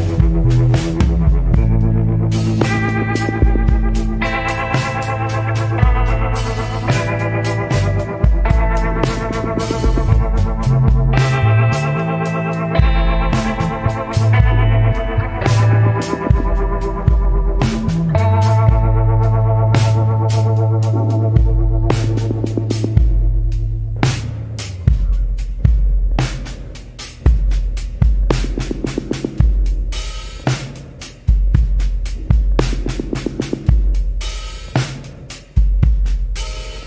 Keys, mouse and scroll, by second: 10.6 scroll down 1, 11.6 scroll up 1, 28.1 scroll down 1, 29.7 scroll up 1, 32.3 scroll down 1, 33.3 scroll up 1, 34.1 scroll down 1.